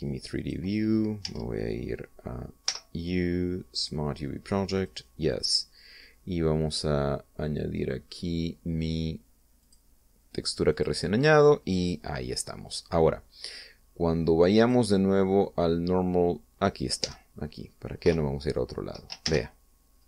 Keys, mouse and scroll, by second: 1.0 click, 3.3 u, 4.4 click, 5.4 click, 10.3 click, 11.3 click, 12.5-12.9 scroll down 1, 15.3 click, 17.7 Tab, 18.7 0, 19.9 shift+z.